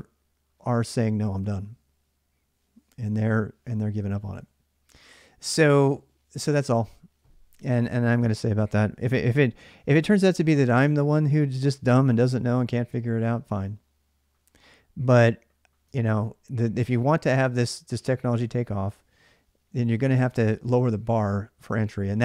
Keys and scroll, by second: 15.7 alt+Tab.